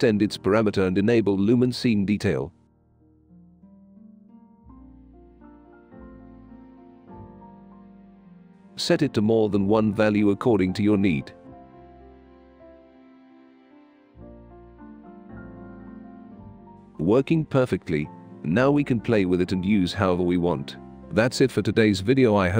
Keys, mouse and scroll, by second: 2.8 click, 4.3 click, 6.1-8.4 right drag, 6.3 s, 7.6 e, 7.9 s, 9.2 click, 9.5 2, 10.0 click, 12.4-19.7 right drag, 12.5-21.5 typing, 20.4 right click, 21.4 click, 21.7 click, 22.4 click.